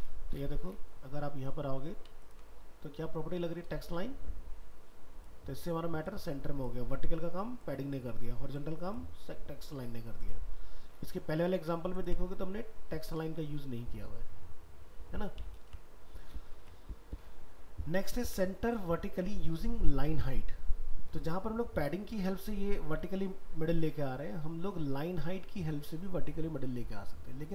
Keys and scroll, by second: 15.6 ctrl+w, 16.6 alt+Tab.